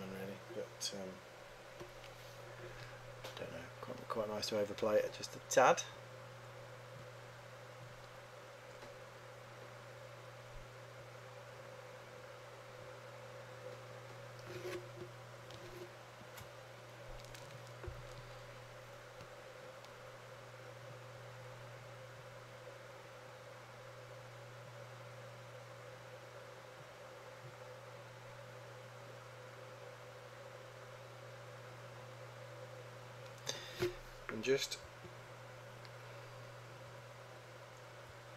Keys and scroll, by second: 35.1 3.